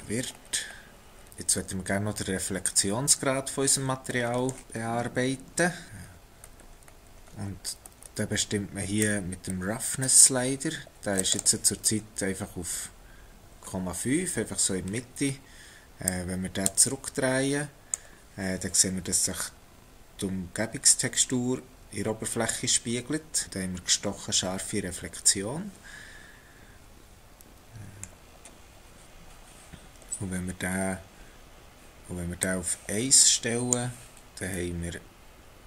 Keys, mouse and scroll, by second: 0.2-0.9 scroll down 4, 1.3 middle click, 4.2 middle click, 5.9 scroll up 10, 6.5-8.1 scroll up 12, 9.0 click, 16.1 click, 19.2 middle click, 32.4 click, 34.6 middle click.